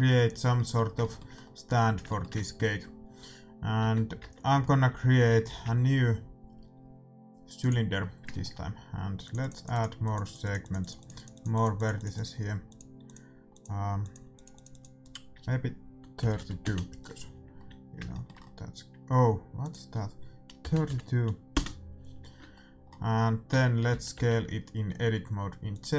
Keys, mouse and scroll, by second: 3.8 Tab, 4.2 Tab, 4.8 a, 5.1 a, 8.0 middle click, 9.3-17.4 drag, 9.3 middle click, 17.6-21.2 middle drag, 19.7-21.5 drag, 23.4 Tab, 23.4-24.9 middle drag, 23.9 s.